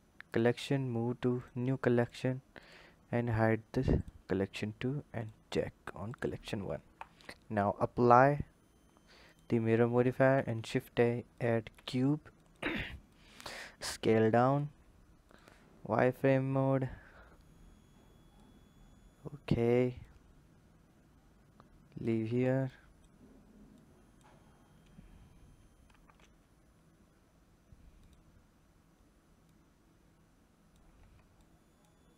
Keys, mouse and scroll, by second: 3.8 click, 5.0 click, 5.9 click, 8.9-10.0 drag, 13.0 click, 15.1 click, 15.9 click, 19.8 click, 22.5 click, 23.5 click, 29.3 click, 32.0 click.